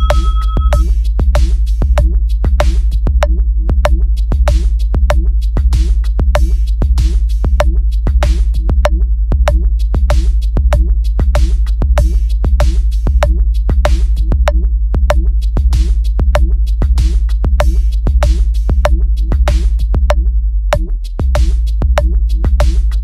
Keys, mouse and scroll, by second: 0.6 click, 0.9 click, 1.4 click, 1.9 click, 2.8 click, 4.6-5.3 drag, 6.2 click, 8.8-9.8 drag, 10.3 click, 13.4 click, 14.9 click, 15.9-16.4 drag, 16.9-17.7 drag, 18.3-18.9 drag, 19.7-20.1 drag, 20.6 click, 21.7 click, 22.1 click.